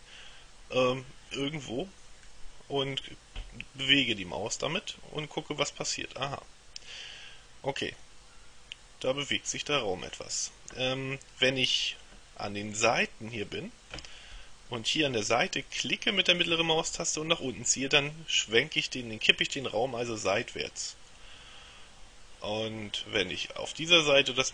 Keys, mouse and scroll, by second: 2.4-10.7 middle drag, 16.6-23.8 middle drag.